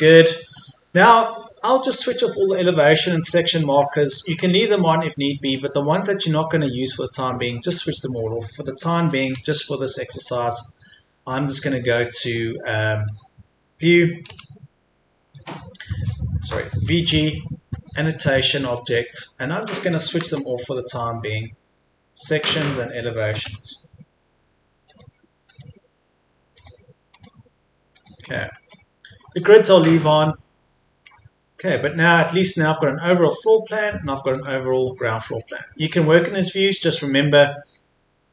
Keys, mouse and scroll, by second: 0.0-0.5 scroll up 1, 0.5 middle click, 1.7-2.6 scroll up 1, 2.6-3.1 scroll down 1, 3.1 middle click, 3.8-4.4 scroll up 1, 4.4 middle click, 5.5-6.2 scroll down 1, 6.2 middle click, 7.3 scroll up 1, 8.8-9.7 typing, 12.1-13.1 scroll up 1, 13.1 click, 14.3 typing, 16.1 middle click, 16.8-17.5 typing, 18.6 click, 21.1-22.3 scroll down 1, 22.3 click, 23.5 e, 24.9 click, 28.3 middle click, 28.7-29.3 scroll down 1, 29.3 middle click, 29.9-31.1 scroll up 1, 31.1-31.8 scroll down 1, 31.8 middle click, 34.2 click, 35.3-36.2 scroll up 1, 36.2-36.8 scroll down 1, 36.8-37.7 scroll up 1.